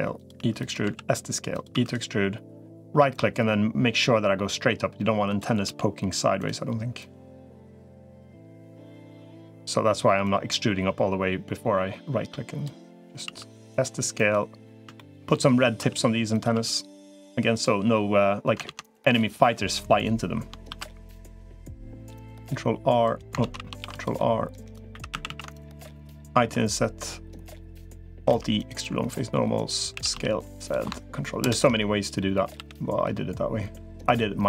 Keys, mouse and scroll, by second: 0.0-1.6 typing, 3.0-5.2 drag, 5.6 s, 6.8-7.8 drag, 8.0 e, 10.2-12.4 drag, 13.0 s, 14.8 shift+middle click, 15.6 s, 16.4 e, 18.6 ctrl+z, 19.2 click, 20.6 ctrl+r, 23.2 ctrl+z, 23.6 ctrl+r, 24.8 3, 25.0 a, 25.2 a, 25.4 alt+shift+click, 26.2 i, 28.2 alt+e, 29.8 s, 31.2 ctrl+KP_Add, 32.4 g.